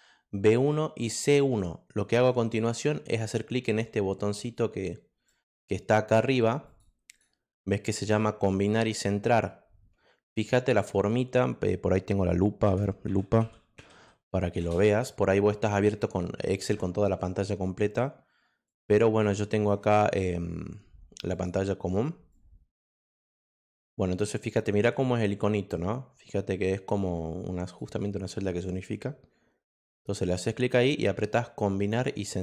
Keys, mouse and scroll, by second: 4.5 click, 6.6 click, 7.0 click, 13.1-14.4 typing, 14.5 Return, 29.8 click, 30.3 click.